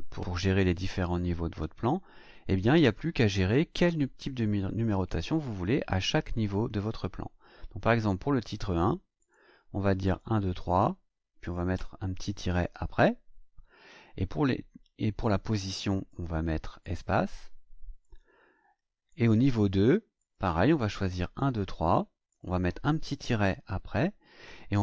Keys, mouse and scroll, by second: 9.2 click, 10.0 click, 11.4 click, 12.5 KP_Subtract, 15.2 click, 16.0 click, 16.8 click, 18.0 click, 19.0 click, 20.1 click, 20.9 click, 22.2 click, 23.4 KP_Subtract.